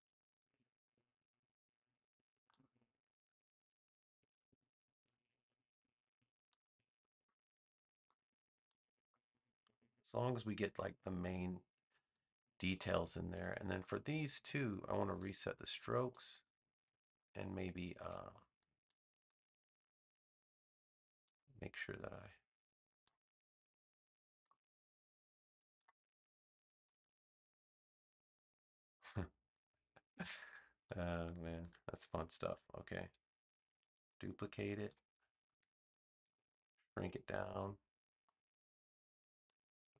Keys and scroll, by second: 4.2 a, 17.9 a, 31.5 v.